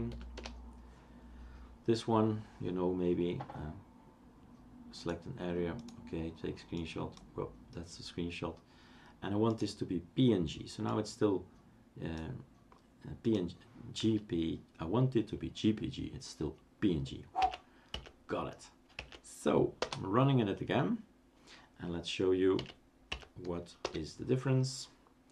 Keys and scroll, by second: 0.0-1.6 typing, 0.3 Return, 17.4 Up, 17.9 Up, 18.9 Up, 19.8 Return, 22.6 Up, 23.1 Up, 23.8 Return.